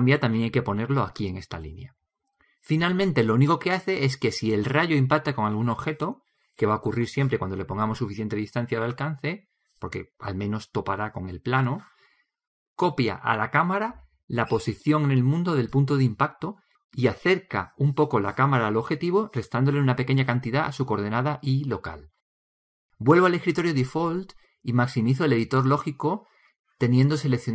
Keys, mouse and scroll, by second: 18.1-23.6 drag, 24.5-26.0 drag, 24.5 n.